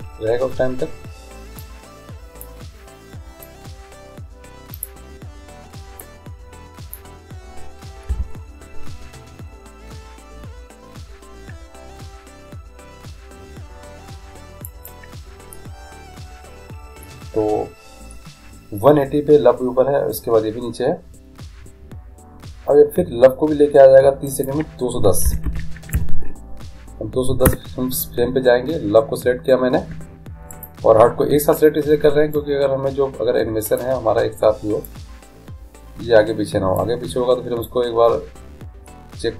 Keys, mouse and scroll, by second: 1.7-5.3 drag, 6.1-7.8 drag, 8.1 i, 24.4-26.2 drag, 30.6-32.4 right drag, 32.4-34.3 drag, 35.0-36.7 drag, 37.7-39.3 drag.